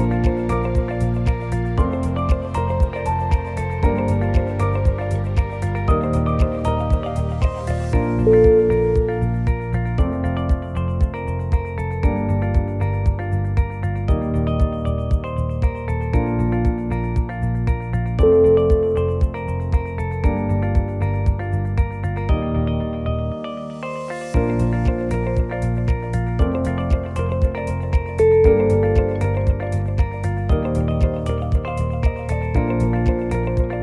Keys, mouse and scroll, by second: 0.0 shift+click, 0.5 f, 0.7 click, 1.2 g, 2.5 click, 2.9 shift+click, 3.5 f, 3.8 click, 4.2 g, 9.1 click, 9.5 shift+click, 10.1 g, 11.0 f, 11.3 click, 11.7 g, 14.5 click, 15.1 shift+click, 15.6 f, 15.9 click, 16.2 g, 17.8 click, 18.3 shift+click, 18.9 f, 19.4 click, 19.7 g, 21.0 g, 22.3 click, 22.7 g, 28.4 click, 28.8 shift+click, 29.7 ctrl+z, 29.7 x, 30.3-30.8 scroll down 6, 31.0 shift+z, 31.2-31.7 scroll up 7, 32.1 shift+click, 32.5 shift+click, 33.5 f.